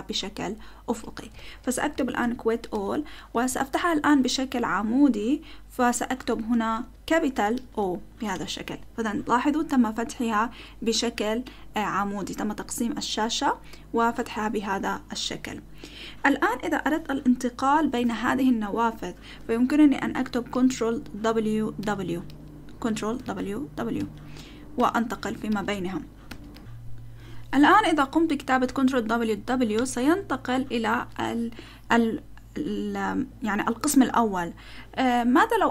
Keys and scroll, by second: 1.1-2.7 typing, 2.7 Return, 3.5 Up, 3.7 Left, 4.2 Left, 4.4-5.7 Left, 6.1 Right, 6.4 Right, 6.8 BackSpace, 7.6 shift+o, 8.3 Return, 20.5 ctrl+w, 21.8 ctrl+w, 22.3 ctrl+w, 23.2 ctrl+w, 23.9 ctrl+w, 24.3 ctrl+w, 25.2 ctrl+w, 26.3 ctrl+w, 26.5 ctrl+w, 29.7 ctrl+w.